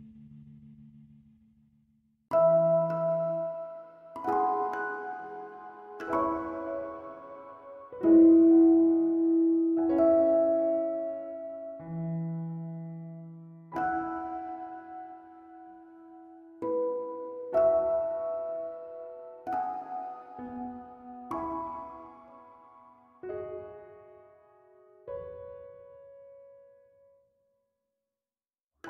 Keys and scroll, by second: 28.3 h, 28.7 h.